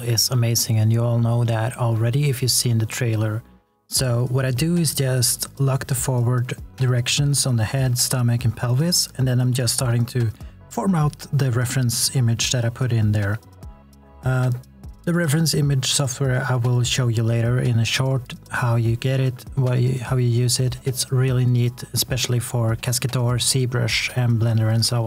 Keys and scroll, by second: 3.2 shift+z, 11.4 e, 14.7 r, 15.7 w.